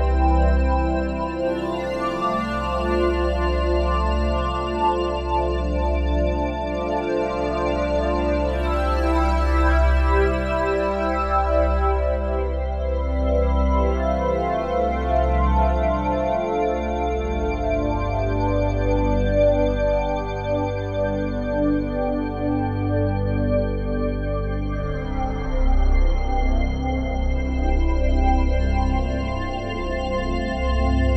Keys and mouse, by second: 1.4 click, 2.3 r, 2.6 x, 2.7 x, 5.2 Escape, 6.2 click, 7.1-7.5 typing, 10.8 Escape, 11.4 click, 12.3-12.8 typing, 13.7 Escape, 14.5 click, 15.5 r, 15.8 x, 15.9 x, 18.9 click, 20.9 ctrl+z, 22.7-23.1 typing, 25.9 Escape, 27.1 alt+r, 27.8-29.1 drag, 29.1 h, 29.7 click, 30.1 h, 30.8-31.1 alt+drag.